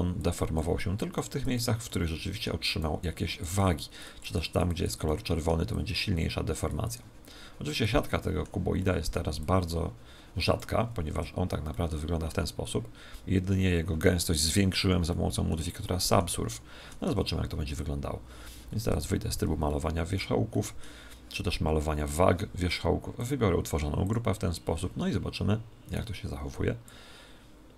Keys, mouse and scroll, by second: 1.8-3.6 middle drag, 5.0-6.8 middle drag, 8.0-10.4 middle drag, 9.3 click, 11.1 Tab, 11.6-13.6 middle drag, 15.0-18.2 middle drag, 17.0 Tab, 18.8 ctrl+Tab, 19.6-22.2 middle drag, 23.1-24.8 drag, 25.8 right click, 26.8-27.7 drag.